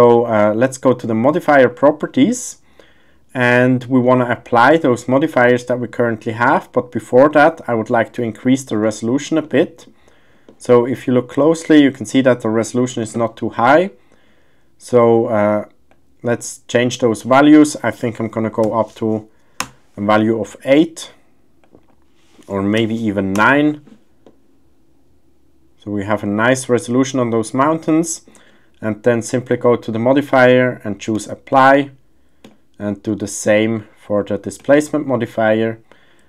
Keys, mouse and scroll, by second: 1.5 click, 4.0 middle click, 6.3-6.7 middle drag, 8.4-8.7 shift+middle drag, 8.7 shift+scroll, 9.4-9.8 middle drag, 10.5 shift+middle click, 10.9 middle click, 11.8 middle click, 15.9-19.6 drag, 21.6-23.5 drag, 24.2-27.6 middle drag, 28.0 shift+middle drag, 28.0-28.5 shift+scroll, 29.5-31.3 drag, 32.4-34.7 drag.